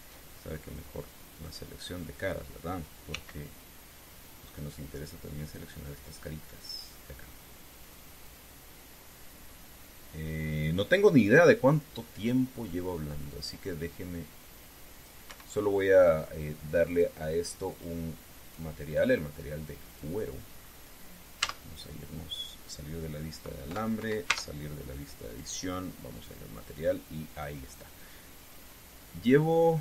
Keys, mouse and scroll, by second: 0.2 shift+middle click, 2.1 click, 3.8 c, 5.4-16.0 drag, 16.0 Escape, 17.6 click, 18.4 click, 19.2 click, 20.6 click, 21.2-21.7 scroll down 1, 22.2 z, 25.0 Tab, 26.0 click, 26.9 click, 29.2 click.